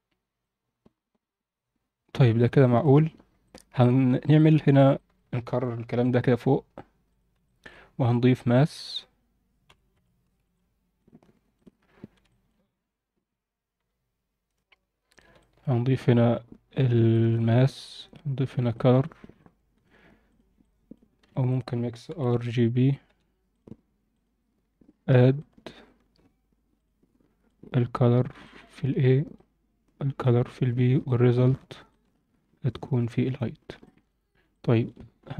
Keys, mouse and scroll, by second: 0.3-3.1 drag, 3.4 drag, 3.8 drag, 4.3 shift+click, 4.6 scroll down 1, 4.9 alt+shift+middle click, 6.2 shift+d, 7.4 alt+shift+middle click, 7.8-8.2 scroll down 4, 8.6 shift+a, 11.8 scroll up 1, 12.2 alt+shift+middle click, 12.6-13.7 scroll up 1, 15.1 click, 15.3 alt+shift+middle click, 17.1 alt+shift+middle click, 18.7 alt+shift+middle click, 19.3-19.8 drag, 20.2 drag, 20.6 click, 21.2 shift+a, 25.3-26.8 drag, 27.4-28.2 drag, 28.4 alt+shift+middle click, 29.3-30.2 drag, 31.0-31.5 alt+shift+middle drag, 31.8-33.5 drag, 34.0 alt+shift+middle click, 34.5 alt+shift+middle click, 35.1-35.3 scroll up 3.